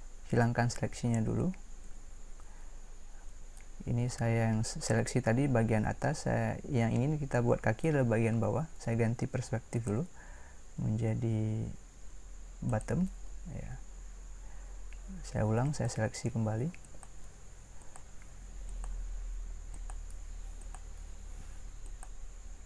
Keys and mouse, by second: 0.4 Escape, 1.8 a, 12.8 Escape, 12.8 a.